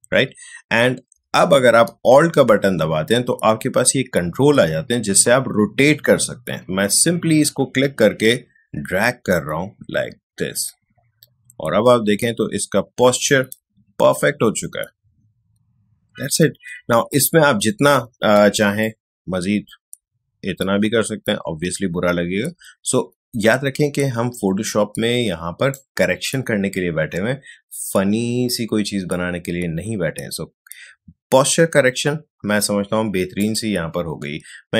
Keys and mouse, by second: 6.9-16.9 alt+drag, 16.9 ctrl+z, 18.8-34.7 alt+drag.